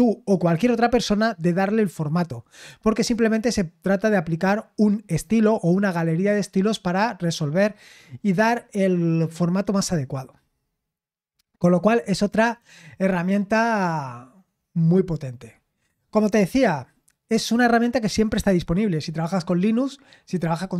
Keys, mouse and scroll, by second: 11.2-14.8 scroll down 7, 14.8-16.1 scroll down 1.